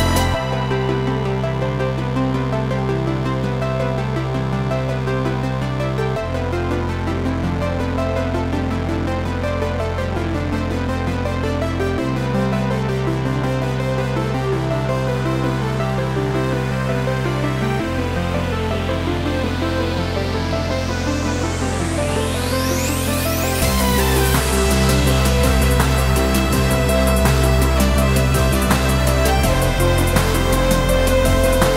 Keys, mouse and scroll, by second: 3.2-4.2 scroll up 1, 6.8-7.6 scroll up 2, 7.6-8.4 scroll up 1, 8.4-9.1 scroll up 1, 9.1 click, 9.6-16.8 drag, 28.8-31.7 middle drag.